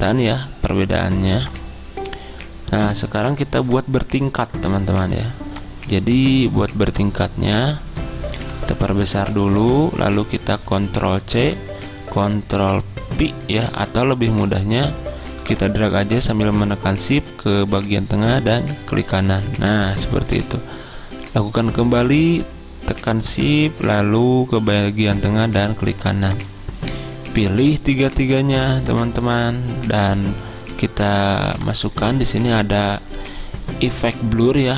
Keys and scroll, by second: 11.3 ctrl+c.